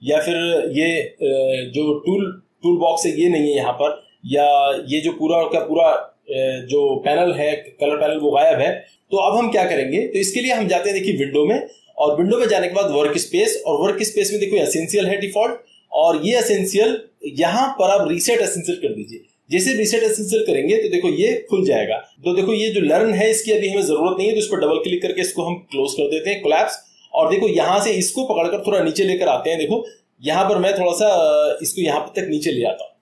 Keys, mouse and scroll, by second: 2.6-4.4 drag, 5.5-6.6 drag, 8.1-8.9 drag, 11.1 click, 19.7 click, 25.0 click, 31.5 click.